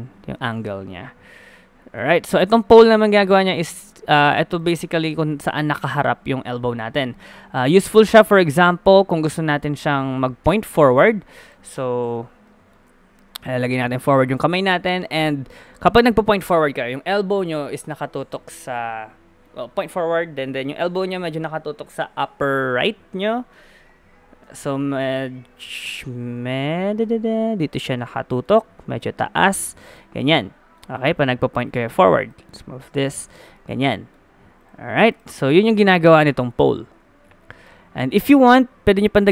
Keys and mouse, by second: 1.3 click, 2.5-4.2 drag, 2.9 g, 5.4 g, 10.6 g, 11.7 KP_3, 13.1 g, 14.7 middle click, 16.8-25.1 middle drag, 25.1 KP_1, 25.4 KP_7, 27.0 g, 28.6 g, 30.2 middle click, 31.2 middle click, 33.3 middle click, 34.0 middle click, 34.7 g, 38.2-39.3 drag.